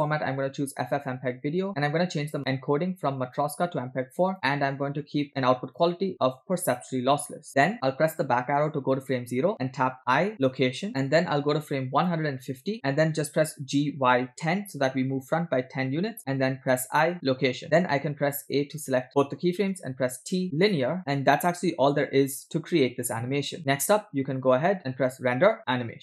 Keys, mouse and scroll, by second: 1.7 scroll down 2, 2.4 click, 3.4-4.3 drag, 4.5 scroll down 1, 5.8-7.1 drag, 7.6-8.2 scroll up 3, 8.6 Left, 10.2 i, 10.9 click, 10.9 x, 12.3 click, 13.5 g, 16.7 i, 18.4 a, 20.0 t, 21.1 click, 25.0-26.0 drag.